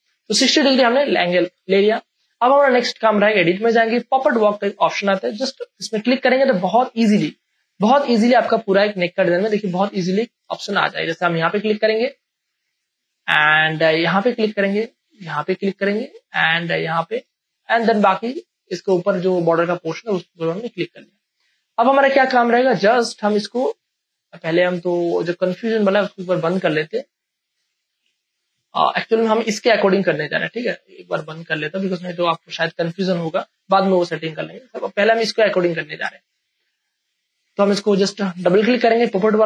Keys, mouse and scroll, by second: 0.0 ctrl+space, 0.6 ', 1.6 space, 1.9-3.3 ctrl+drag, 8.3 ctrl+space, 8.6 ctrl+click, 8.8 ctrl+space, 9.6 ctrl+space, 11.4 click, 14.2 click, 15.5 space, 15.7 click, 16.1 space, 17.0 click, 17.3 space, 17.5 click, 17.8 space, 18.3 click, 18.3 click, 19.0 space, 20.9 ctrl+click, 25.2 click, 30.5 Return, 32.0 click, 36.1 space, 36.7 click.